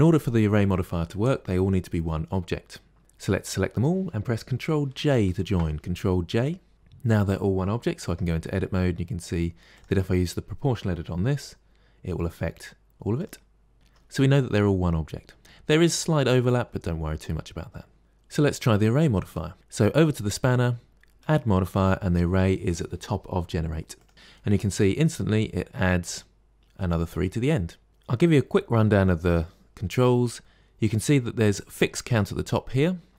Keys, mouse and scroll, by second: 3.1 drag, 5.0 ctrl+j, 7.9 Tab, 9.6 click, 11.1 g, 13.7-16.5 middle drag, 21.1-24.1 drag, 27.9-30.0 shift+middle drag, 32.0-33.1 drag.